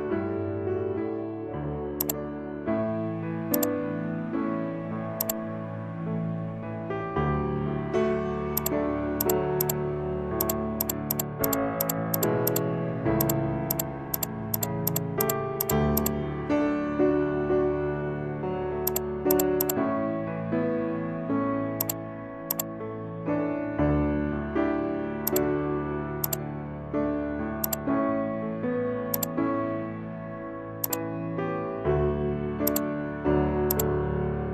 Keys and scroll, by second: 6.3 ctrl+z, 17.4 ctrl+0.